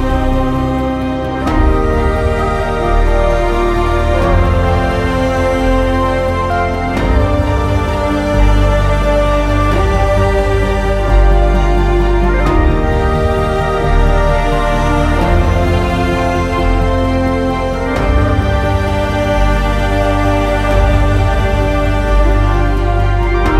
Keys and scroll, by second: 5.6 ctrl+a, 6.2 r, 7.4 r, 8.8 ctrl+z.